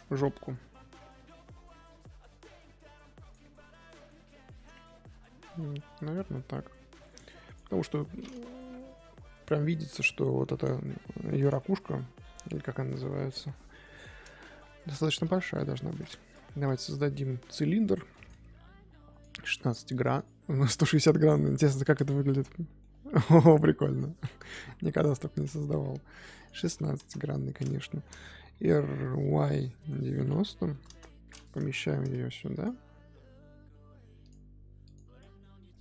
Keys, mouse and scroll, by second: 0.8 g, 3.4-5.0 middle drag, 5.0 Tab, 5.3 Tab, 5.5-7.4 middle drag, 7.4 click, 7.6 KP_3, 8.8 shift+middle drag, 9.0-10.8 scroll up 1, 11.4 scroll down 1, 11.6-15.5 middle drag, 15.5 KP_3, 19.1-21.6 drag, 21.9-22.3 scroll up 1, 22.3 z, 22.6-23.6 shift+middle drag, 23.6 scroll up 2, 23.9-24.4 middle drag, 24.4 scroll down 3, 24.6 KP_1, 26.3-27.9 drag, 27.9-28.3 shift+middle drag, 28.3 r, 34.8 click, 35.5 Tab.